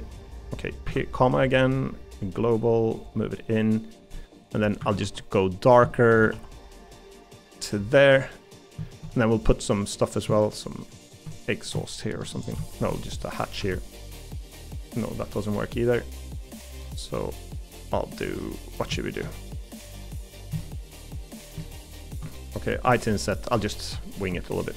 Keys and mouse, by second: 0.8 ., 3.1 click, 4.1 middle click, 4.8 a, 5.0 g, 5.9 shift+middle click, 6.3 g, 7.9 middle click, 8.8 middle click, 9.2 middle click, 12.9 middle click, 15.8 middle click, 16.8 middle click, 18.4 middle click, 19.0 shift+middle click, 19.3 middle click, 19.8 middle click, 22.3 middle click.